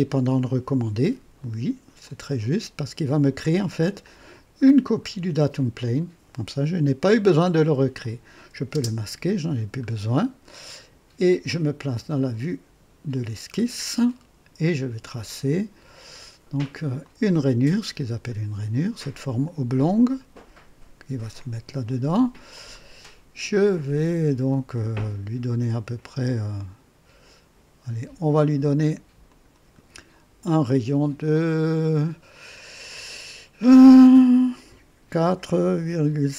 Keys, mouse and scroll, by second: 2.0 click, 4.0 click, 4.6-5.1 scroll down 3, 7.9 click, 8.7 space, 9.8-10.3 scroll up 4, 10.5-11.1 right drag, 12.0 click, 13.5-13.8 scroll up 2, 14.0-14.7 right drag, 17.0 click, 18.0-18.4 scroll up 2, 19.7 click, 21.3 click, 22.7 right click, 24.7-28.3 drag, 29.2 click, 31.3 click, 35.1 KP_4, 35.8 KP_Decimal.